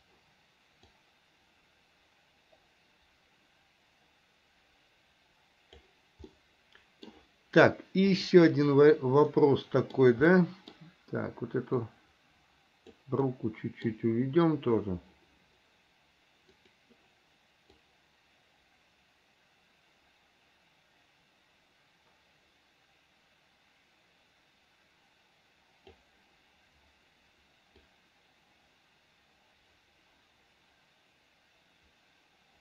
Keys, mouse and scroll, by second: 1.1-6.1 drag, 6.5 middle click, 8.3 click, 9.5 middle click, 10.6 middle click, 12.1-13.1 drag, 13.4 middle click, 16.8 click, 18.0-26.2 drag, 28.1-32.6 drag.